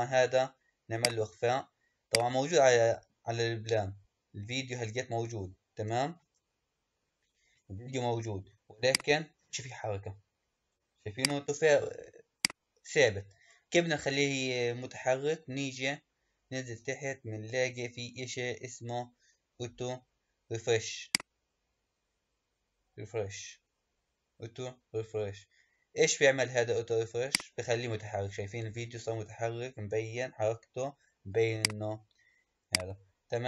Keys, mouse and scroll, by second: 0.9 click, 2.0 click, 2.5-5.1 scroll up 5, 5.1-6.2 scroll up 1, 6.2-8.8 shift+middle drag, 8.8-14.8 drag, 14.8-16.4 scroll down 7, 16.4-17.9 scroll down 2, 20.9 click, 27.2 click, 31.5-33.4 drag.